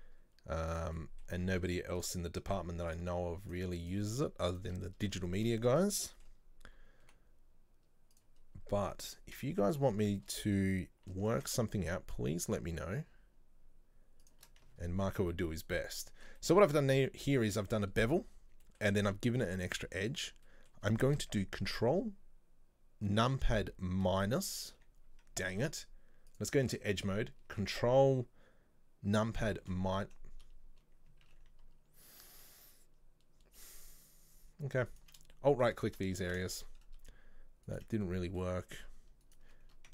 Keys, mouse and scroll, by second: 1.0 middle click, 1.7 z, 3.0 click, 3.5 right click, 3.9 shift+right click, 4.2 shift+middle click, 4.6 shift+right click, 4.9 middle click, 5.6 scroll down 2, 6.0-7.1 middle drag, 7.1 typing, 9.0 shift+middle click, 9.8 scroll up 2, 10.1-11.3 shift+middle drag, 11.3 ctrl+b, 16.1-19.1 shift+middle drag, 19.1-19.8 scroll up 4, 20.5-23.5 shift+middle drag, 24.1 ctrl+KP_Subtract, 25.6 ctrl+z, 26.3 click, 29.7 ctrl+KP_Subtract, 31.3 ctrl+z, 34.9 alt+right click, 35.4 shift+middle click, 36.2 scroll down 2, 36.5 shift+middle click, 36.8-37.7 scroll up 4, 37.7 alt+shift+right click, 38.1-39.3 shift+middle drag, 39.3 alt+shift+right click.